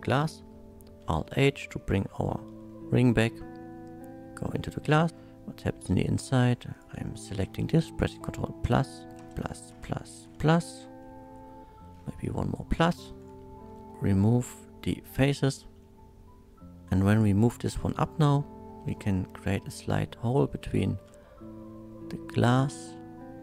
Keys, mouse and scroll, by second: 1.0 alt+h, 1.4 middle click, 2.2 shift+middle click, 2.8-4.4 shift+middle drag, 4.7 shift+middle click, 5.2 middle click, 5.2 shift+2, 6.7 click, 8.6 ctrl+KP_Add, 9.3 ctrl+KP_Add, 11.0 middle click, 12.8 ctrl+KP_Add, 13.7 ctrl+shift+KP_Add, 13.7 middle click, 13.9 x, 15.0 click, 15.8 middle click, 17.1 click, 17.7 l, 19.3 KP_1, 20.6 g, 20.8 z.